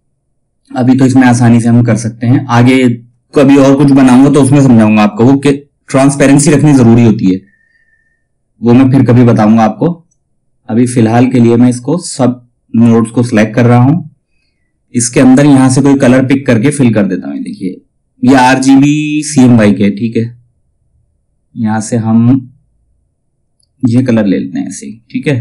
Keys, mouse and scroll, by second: 9.6-16.9 drag, 23.4 click.